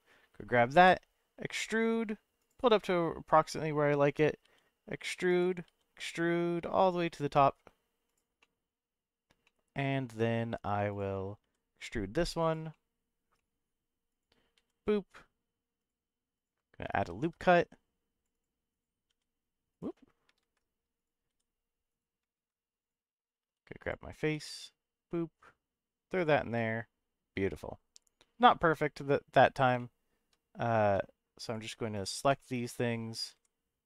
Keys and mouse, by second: 0.7 e, 2.4 click, 2.7-4.1 middle drag, 4.4 e, 5.3 click, 5.6 e, 8.1 click, 8.4 middle click, 9.4 middle click, 11.4 e, 12.4 click, 12.7 middle click, 13.3 middle click, 14.1 click, 14.5 e, 15.8 click, 16.3 click, 17.1 ctrl+r, 18.3 click, 18.7 click, 19.1 e, 19.7 right click, 20.4 ctrl+z, 20.9 click, 21.3 e, 21.9 right click, 22.3 ctrl+z, 22.8 click, 23.4 3, 23.8 click, 24.3 e, 26.1 click, 26.5-29.1 middle drag, 29.7 shift+middle click, 30.8 4, 32.4 middle click, 33.3 g.